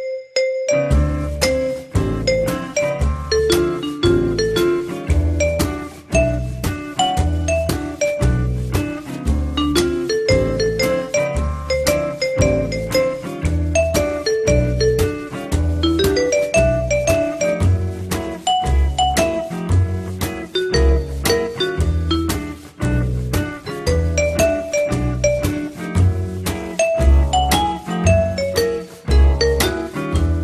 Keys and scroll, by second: 4.5 4, 15.9 f, 22.7 alt+l, 24.0 p, 24.5 z.